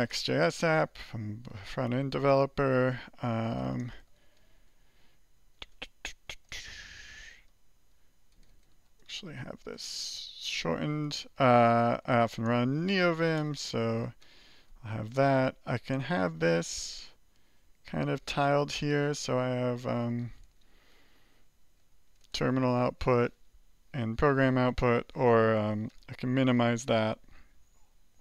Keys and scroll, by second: 0.1 alt+Return, 3.6-4.4 typing, 5.7-13.7 typing, 14.2 alt+k, 14.9 alt+j, 16.3 alt+g, 17.4 alt+j, 17.8 alt+k, 18.4 alt+shift+k, 20.4 ctrl+l, 20.7-22.3 typing, 25.9 alt+m.